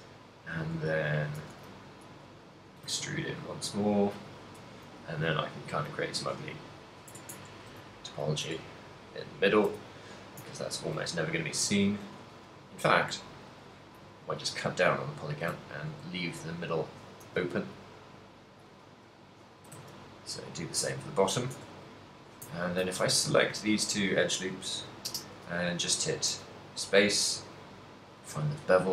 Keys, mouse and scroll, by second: 0.4 click, 1.5 e, 2.1 s, 4.4 click, 4.8 e, 5.4 right click, 5.8 alt+m, 7.1 Tab, 7.6 ctrl+middle click, 7.9 shift+middle click, 8.6 Tab, 8.8 middle click, 9.7 a, 10.3 middle click, 10.4 ctrl+middle click, 11.9 ctrl+middle click, 12.5 middle click, 13.4 right click, 13.8 x, 15.0 middle click, 15.6 ctrl+middle click, 16.6 alt+right click, 17.3 e, 17.8 right click, 18.4 s, 18.8 click, 18.9 e, 19.4 s, 20.8 Tab, 20.8 click, 21.3 ctrl+middle click, 21.6 Tab, 22.3 alt+right click, 22.8 ctrl+middle click, 23.1 middle click, 23.8 ctrl+middle click, 24.8 alt+shift+right click, 25.1 space.